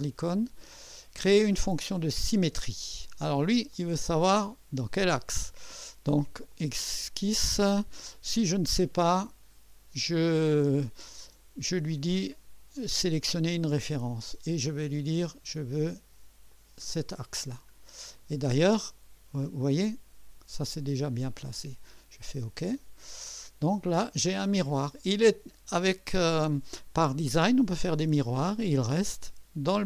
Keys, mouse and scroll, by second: 2.2 click, 3.7-4.9 drag, 6.5 click, 8.5-9.1 scroll down 1, 9.4-11.0 scroll down 2, 12.9 click, 13.7-14.0 scroll down 2, 16.5 click, 17.7 scroll down 2, 18.1-18.5 scroll up 1, 18.7-21.6 drag, 22.7 click, 24.4-24.7 scroll down 2.